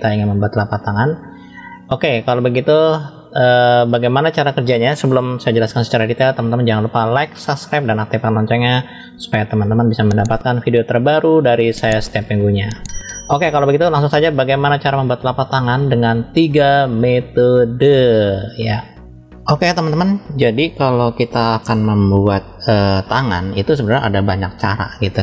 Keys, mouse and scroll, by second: 9.8-15.2 middle drag, 15.5-19.3 middle drag.